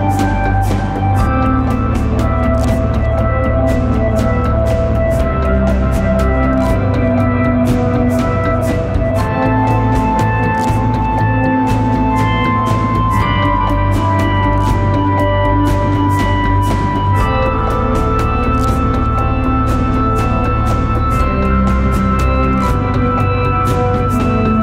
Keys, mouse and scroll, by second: 3.0 right click, 4.3 double click.